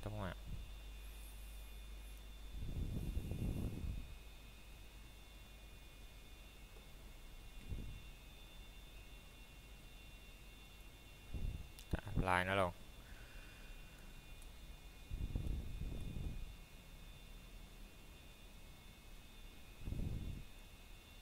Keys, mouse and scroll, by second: 1.4 a, 7.7 x, 10.1 click, 10.5 scroll down 1, 10.7 middle click, 11.3-11.8 scroll up 1, 11.8 middle click, 11.9 scroll down 1, 12.6 middle click, 13.3-14.2 scroll up 1, 14.2 middle click, 14.9-17.2 scroll up 1, 20.0 Tab.